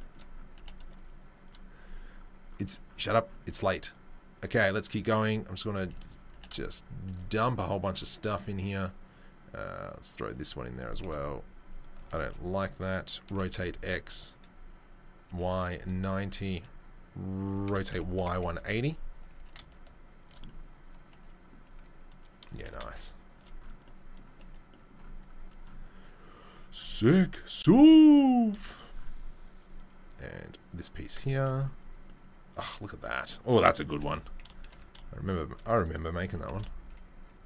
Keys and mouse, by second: 0.5 g, 3.8 click, 3.8 middle click, 3.8 right click, 4.4-5.2 drag, 4.4-5.2 middle drag, 4.4-5.2 right drag, 5.8 s, 6.3 g, 9.1-10.3 drag, 9.1-10.3 middle drag, 9.1-10.3 right drag, 11.0 r, 12.0-29.9 alt+middle drag, 12.2 r, 17.6 r, 19.3 s, 22.5 g, 29.9-30.9 drag, 30.9-37.4 shift+middle drag, 33.9 g, 36.2 g.